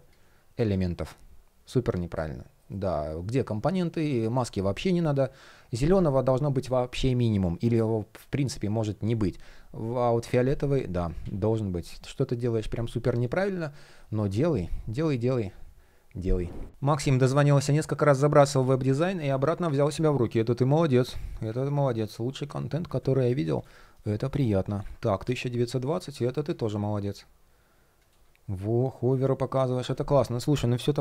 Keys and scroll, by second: 2.2 shift+p, 2.2 alt+shift+l, 2.5 shift+o, 10.5 shift+p, 13.6 shift+p, 23.4 shift+0, 24.4 super+\.